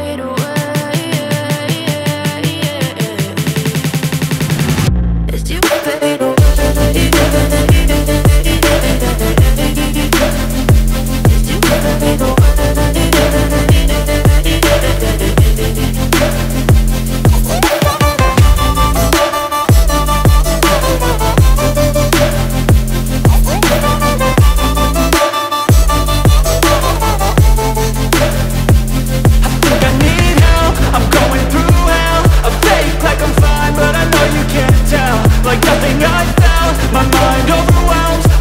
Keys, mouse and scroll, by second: 23.9 ctrl+a, 35.6 ctrl+d.